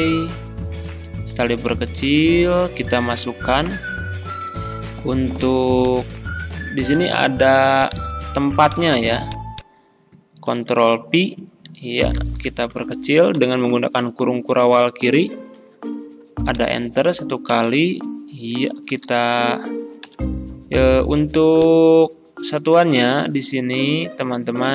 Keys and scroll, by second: 6.8 ctrl+c, 10.6 ctrl+v, 12.2 ctrl+a, 13.4 ctrl+[, 17.5 Delete, 18.9 ctrl+a, 20.1 ctrl+].